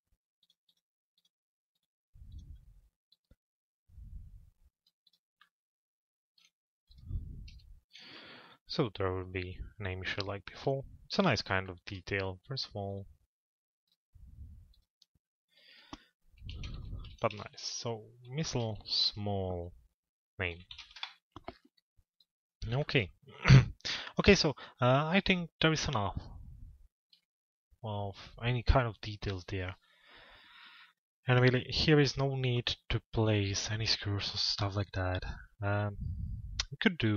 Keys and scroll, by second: 7.1 F4, 20.6 Return.